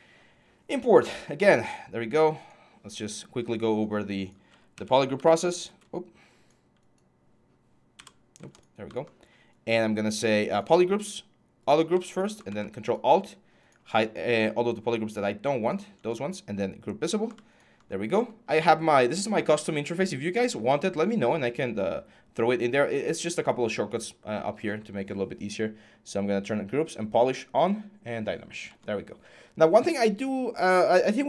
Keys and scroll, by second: 4.5-4.9 typing.